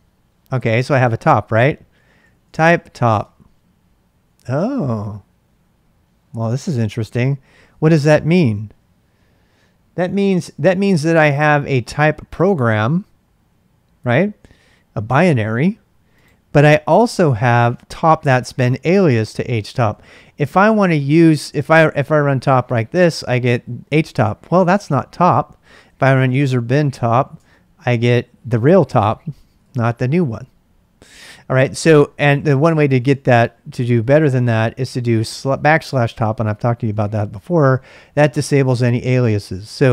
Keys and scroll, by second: 1.9-3.3 typing, 21.8-22.8 typing, 24.3-30.1 typing, 32.6 ctrl+[, 32.8-35.3 typing, 35.8 Return, 37.3 q, 38.7-39.9 typing.